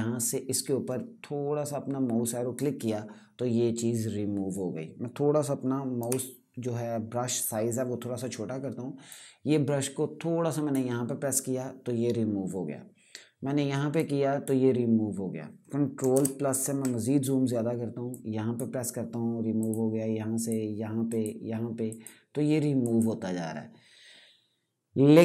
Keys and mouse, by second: 5.7 [, 8.8 click, 13.7 click, 15.8 KP_Add, 17.8 click.